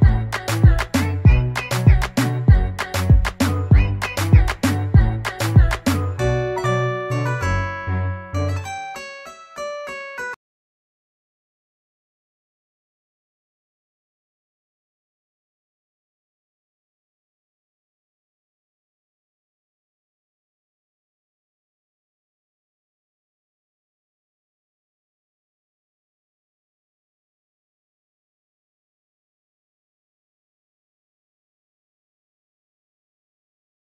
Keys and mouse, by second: 1.0 click, 3.0 click, 4.5 click, 6.2 click, 6.3 click, 9.0 click, 9.1 click, 10.5 click, 11.1 ctrl+a, 12.0 typing, 12.3 ctrl+a, 13.8 BackSpace, 13.9 click, 18.1 click, 19.8 click, 25.3 click, 26.8 click, 26.9 click, 27.6 BackSpace, 28.6 u, 31.8 click, 33.2 click.